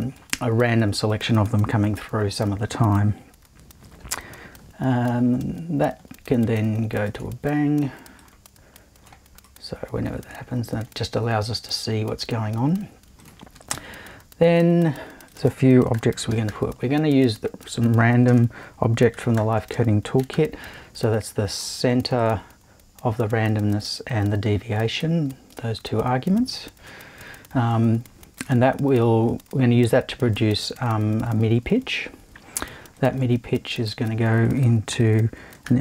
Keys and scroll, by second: 5.1 shift+super+b, 13.7 super+i, 15.7-17.0 typing, 18.3-20.8 typing, 33.3 super+l, 34.9 f, 35.6 m.